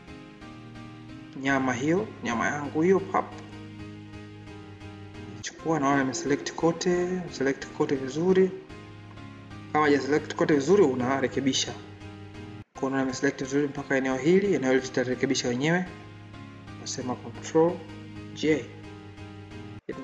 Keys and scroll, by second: 18.1 ctrl+j.